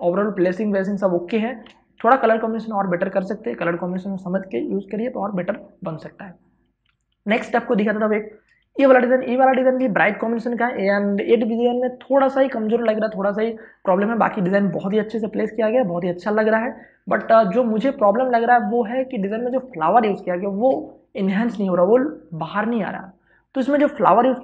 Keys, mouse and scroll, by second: 2.0 space, 2.2 ctrl+click, 7.4 ctrl+shift+Tab, 8.7 space, 9.0 ctrl+click, 17.4 space, 17.5 click, 18.0 space, 18.2-24.1 ctrl+drag, 24.1 space, 24.3 ctrl+click.